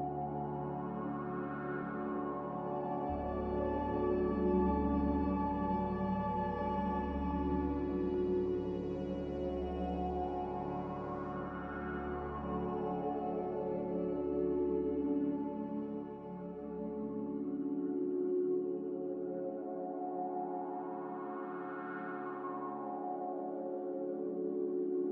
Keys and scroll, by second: 4.1 r, 5.6 a, 8.5 a.